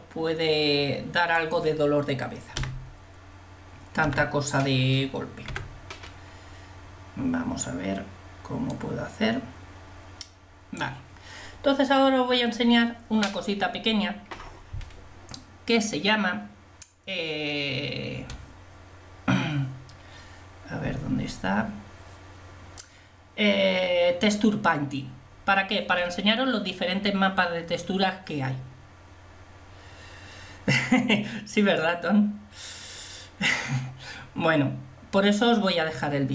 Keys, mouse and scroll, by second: 4.4 n, 5.6 t, 8.8-10.2 drag.